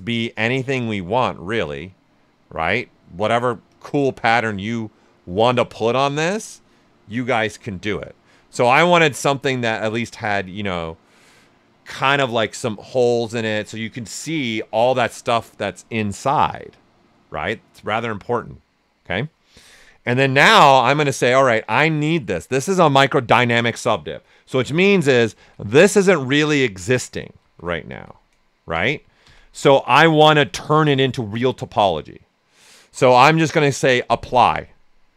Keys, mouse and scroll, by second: 13.0 click, 20.1 click, 20.3 ctrl+right click, 21.2-24.5 alt+right drag, 24.5-29.2 typing.